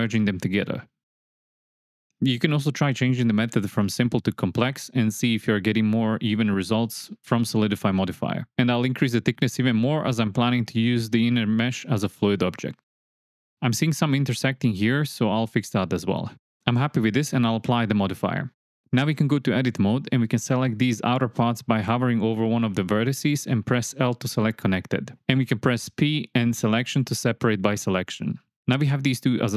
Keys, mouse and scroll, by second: 0.0 m, 0.5 click, 0.6 middle click, 1.9 Tab, 2.1 shift+KP_7, 3.2-3.8 drag, 4.4 shift+drag, 4.4 shift+middle drag, 5.0 shift+middle click, 6.0 shift+click, 13.7 Tab, 14.0 alt+z, 14.2 click, 14.4 alt+z, 14.5 click, 15.1 m, 16.2 click, 16.7 alt+z, 18.1-19.3 drag, 19.8-20.6 middle drag, 21.0 Tab, 21.6 click, 24.0 l, 25.5 l, 27.6 p.